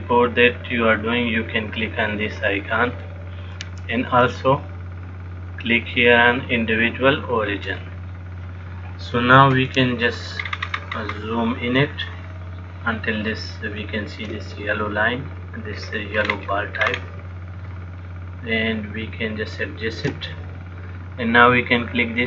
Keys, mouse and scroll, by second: 3.1 click, 10.7-12.0 scroll up 7, 12.3 shift+middle click, 16.0-17.1 scroll down 3, 16.5-17.1 scroll up 3, 17.1-17.5 scroll up 5, 17.9 shift+middle click, 21.6 click.